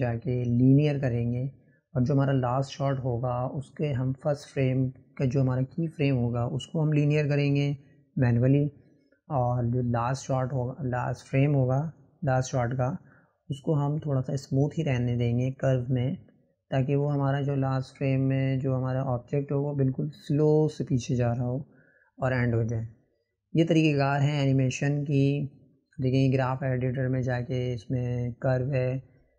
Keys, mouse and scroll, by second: 2.7-4.2 right drag, 4.2 click, 5.5-8.5 drag, 9.6-12.6 drag, 15.0 click, 20.7-28.6 drag, 29.1 click.